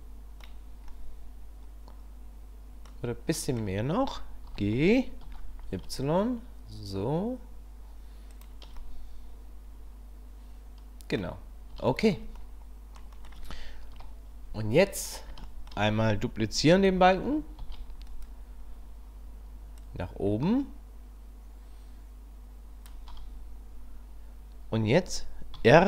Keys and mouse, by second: 1.0-2.9 middle drag, 3.3 middle click, 4.5 g, 8.9-9.6 drag, 9.6-11.2 middle drag, 11.9 shift+middle click, 12.4-13.0 middle drag, 13.9 KP_1, 15.3-15.8 shift+middle drag, 17.6 shift+d, 19.9 click, 25.5 r.